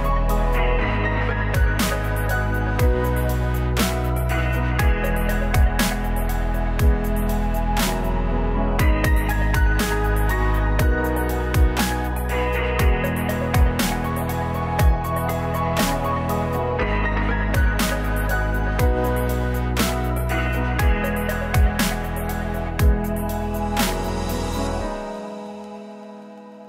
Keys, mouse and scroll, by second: 0.1 right click, 0.7 i, 2.4 i, 3.0 e, 3.5 click, 4.7 click, 4.9 middle click, 5.2 right click, 5.3 middle click, 5.5 click, 9.0 right click, 9.7 middle click, 10.2 right click, 10.3 middle click, 10.7 click, 13.6 right click, 13.9 e, 14.3 click, 14.9 s, 15.8 e, 16.3 click, 17.5 a, 17.7 a, 22.2 Tab, 23.2 Tab, 23.2 ctrl+r, 24.4 ctrl+r, 25.7 ctrl+r, 26.4 ctrl+r.